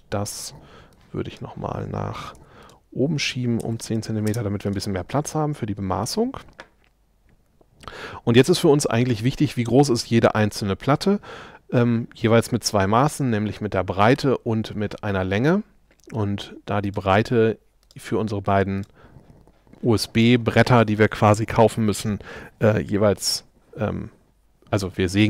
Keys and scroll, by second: 2.4 m, 3.7 1, 3.9 Escape.